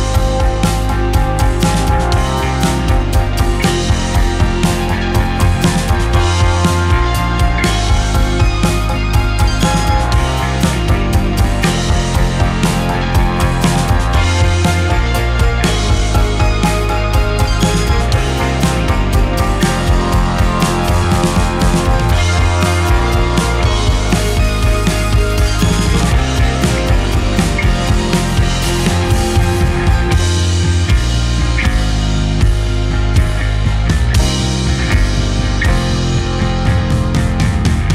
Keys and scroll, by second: 3.1 space, 15.1 space, 16.8 Delete, 18.3 Delete, 20.4 Delete, 21.1 space, 30.5 ctrl+h, 37.6 space.